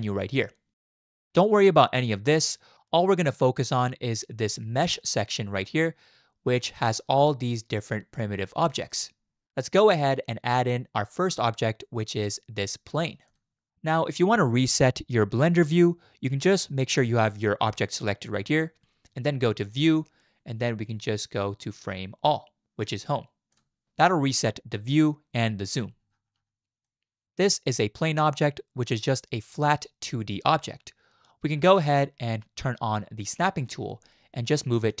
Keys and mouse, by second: 19.7-23.6 drag, 26.8-27.2 middle drag, 29.6-31.8 middle drag, 33.3 click, 34.9 click.